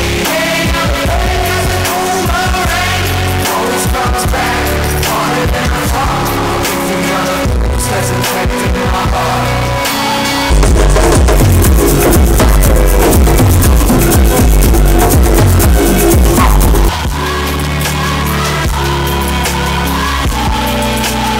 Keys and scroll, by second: 16.8 Page_Down.